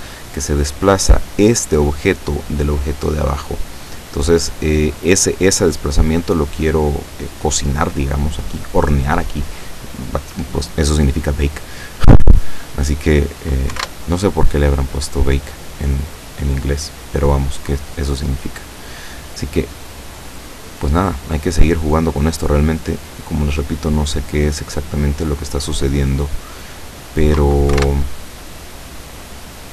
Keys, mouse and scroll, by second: 0.2 middle click, 3.3-4.0 scroll down 1, 4.6 middle click, 5.4-6.5 middle drag, 11.3 scroll down 2, 12.8 click, 13.8 1, 13.9 Return, 15.2 click, 18.5-19.0 drag, 19.3 click, 22.2-24.1 drag, 24.5 click, 26.7 click, 27.7 1, 27.8 Return, 29.1 click.